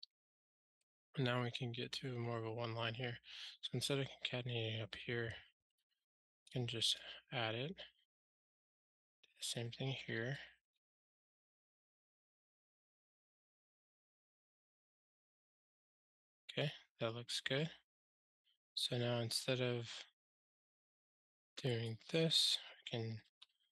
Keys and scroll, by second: 12.4 alt+super+l, 13.2 ctrl+alt+shift+r, 23.2 ctrl+alt+shift+r.